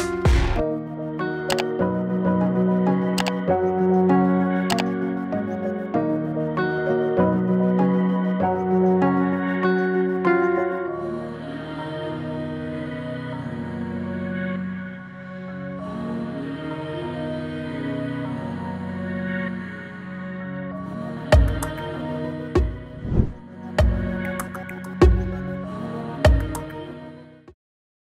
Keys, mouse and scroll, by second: 0.1 space, 1.7-2.4 click, 2.2 space, 4.3-5.5 drag, 12.8 Return, 14.5-15.7 drag, 18.2 click, 18.9 space, 21.3-21.9 click, 21.9 space.